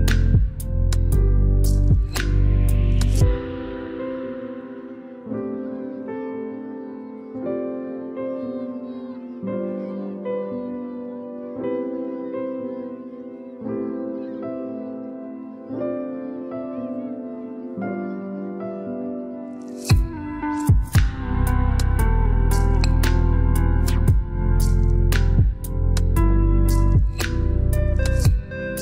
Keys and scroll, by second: 24.6 1, 25.1 4, 25.5 0, 26.3 Return.